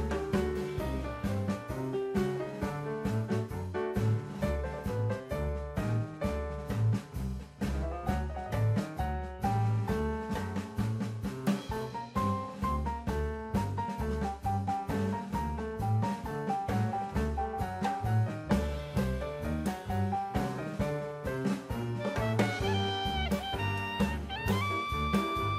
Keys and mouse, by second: 2.0 Tab, 5.2 m, 10.2 click, 15.8 click, 16.0 shift+a, 17.6 s, 18.9 click, 19.7 click, 20.4-21.6 drag, 22.1-22.6 middle drag, 23.1-23.7 drag, 24.1 middle click.